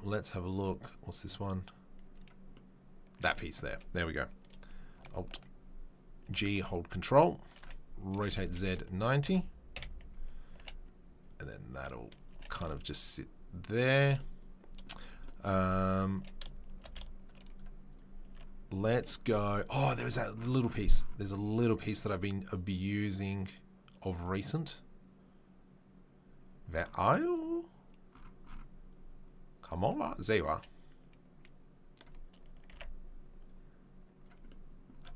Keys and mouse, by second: 0.2-2.2 drag, 2.2-17.8 middle drag, 6.2 g, 8.1 r, 9.7 KP_7, 10.5 g, 11.7 s, 12.3 g, 17.8 click, 18.0-29.8 middle drag, 18.2 Tab, 19.9 Tab, 29.8 click, 29.9 middle drag, 30.1 click, 30.2-30.5 middle drag, 30.5-32.0 drag, 32.0-33.5 middle drag, 32.7 Tab, 33.5-34.2 drag, 34.2-35.1 middle drag.